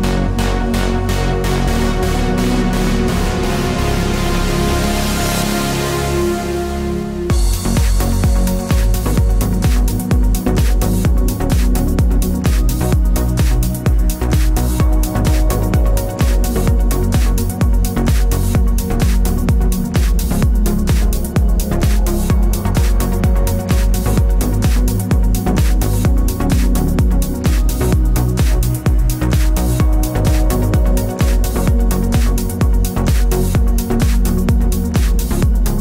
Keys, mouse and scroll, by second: 2.4 click, 3.3 g, 5.9 click, 6.1 scroll up 1, 7.3 scroll down 1, 7.8 click, 9.2 click, 9.5 click, 9.8 click, 10.1 click, 10.4 scroll up 1, 11.1 click, 14.1-14.6 scroll down 1, 14.7 click, 28.5 click, 29.2 click.